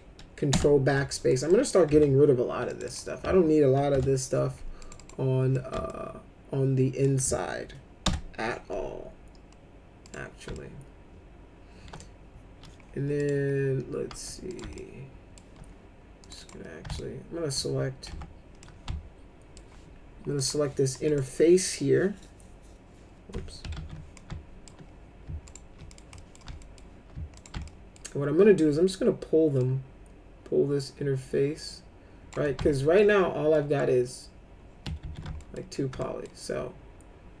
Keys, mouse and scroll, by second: 0.5 ctrl+BackSpace, 1.5 middle click, 1.9 F3, 2.7 click, 2.8 click, 3.9 ctrl+BackSpace, 4.8 click, 5.0 click, 5.5 middle click, 5.9-7.0 alt+middle drag, 8.0 ctrl+BackSpace, 10.0 click, 10.5-11.9 alt+middle drag, 13.2 click, 14.5 click, 14.7 alt+middle click, 16.2 click, 16.4 click, 17.0 alt+middle click, 18.0 F3, 18.6 alt+middle click, 20.3 click, 21.0 click, 23.7 ctrl+z, 24.1 alt+middle click, 25.5 ctrl+click, 25.9 middle click, 26.2 middle click, 26.6 alt+middle click, 27.3 ctrl+click, 27.6 alt+middle click, 29.6-32.3 drag, 32.7 alt+middle click, 33.5 middle click, 35.0 ctrl+z, 35.3 alt+middle click, 35.9 alt+middle click.